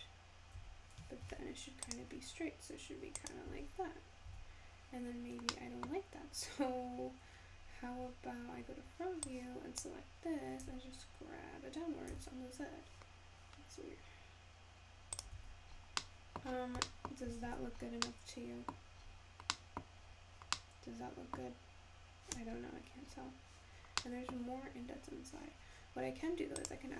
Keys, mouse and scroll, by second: 0.6 Tab, 1.3 ctrl+r, 3.5 Tab, 4.3 Tab, 5.1-5.5 scroll down 2, 5.5 middle click, 7.6 `, 9.3 click, 10.6 g, 15.4 Tab, 15.8 scroll down 3, 16.0-16.5 middle drag, 16.5-16.9 scroll up 4, 16.9-17.6 middle drag, 17.6 alt+z, 17.9 scroll down 4, 18.1-19.0 middle drag, 19.0-19.7 scroll up 4, 19.7 middle click, 20.0-20.5 scroll up 1, 20.5-22.4 middle drag, 22.4-22.9 scroll up 4, 23.2-24.0 scroll down 3, 24.0-24.7 middle drag, 24.7-25.8 scroll up 1, 25.8-26.9 scroll down 1.